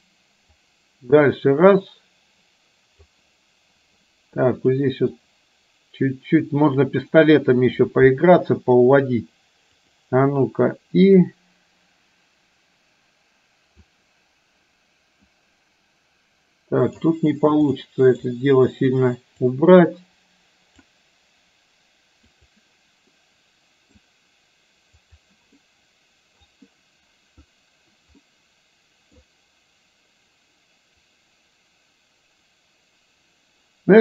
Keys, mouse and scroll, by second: 0.7-3.3 drag, 4.4 click, 5.2-6.5 drag, 9.9 click, 11.3-14.0 drag, 15.4-17.0 drag, 17.8 middle click, 19.5-20.9 drag, 23.2 middle click, 25.0 click, 25.7 middle click, 28.3-29.3 middle drag, 31.2-34.0 drag.